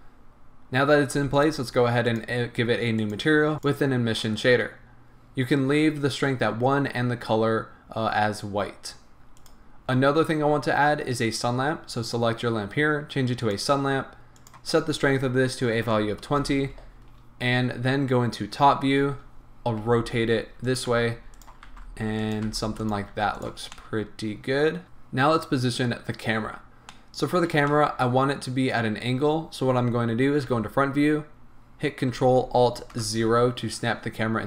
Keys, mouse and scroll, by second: 1.3 click, 2.1 drag, 3.0-9.5 drag, 7.6-8.5 scroll down 2, 8.5-9.4 scroll up 2, 13.4 click, 14.6-20.8 drag, 16.4 Return, 18.5 KP_7, 19.8 r, 20.9 g, 21.5 click, 21.7 r, 22.3 click, 22.5 g, 22.9 click, 23.1 r, 23.4 click, 23.7 scroll down 1, 23.9-25.1 middle drag, 26.2-26.6 scroll up 1, 26.9 middle click, 27.9-30.5 middle drag, 30.5 KP_1, 32.9 ctrl+alt+KP_0.